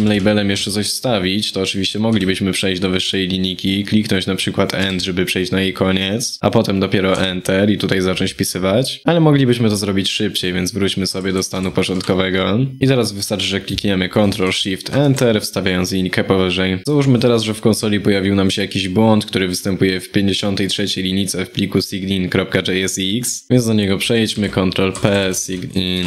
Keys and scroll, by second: 14.6 ctrl+shift+Return, 24.0 ctrl+p.